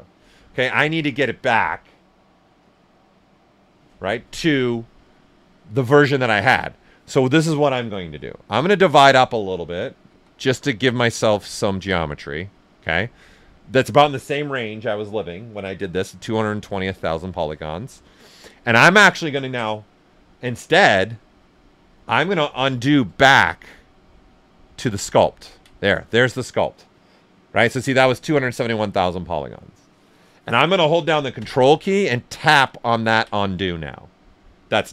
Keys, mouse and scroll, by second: 8.2 alt+right click, 10.0 ctrl+d, 22.7 ctrl+z, 30.9 ctrl+z, 32.6 ctrl+click.